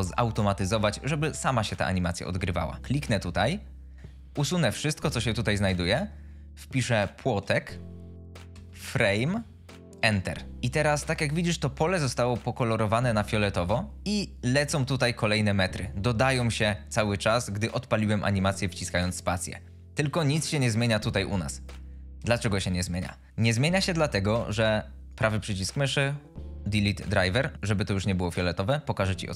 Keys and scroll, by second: 4.8 BackSpace, 7.4-9.2 typing, 9.9 Return, 22.3 space, 23.3 BackSpace.